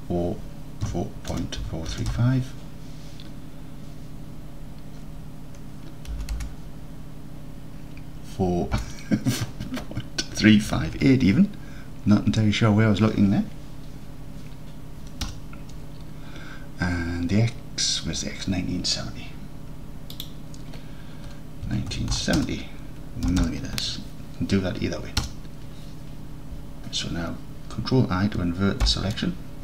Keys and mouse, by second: 6.4 BackSpace, 20.4-26.3 drag, 23.5 m, 28.9 ctrl+i.